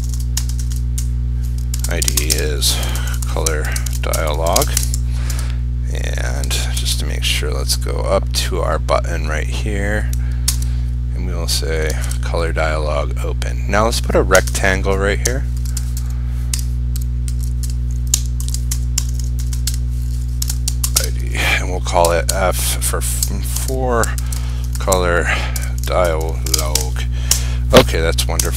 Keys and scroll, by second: 6.9 ctrl+c, 10.6 ctrl+/, 12.1 ctrl+v.